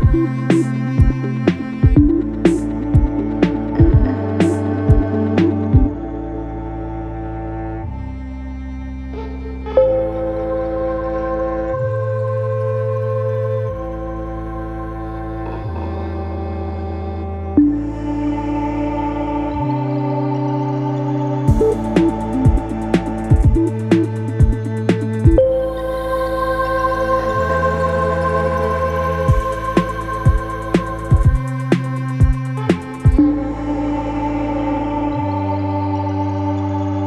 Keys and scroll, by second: 2.4 ], 2.8 ., 3.3 ctrl+z, 3.5 ., 16.7 3, 16.8 ], 17.7 4, 21.2 3, 25.6 ], 28.1 4, 31.7 3, 31.9 ].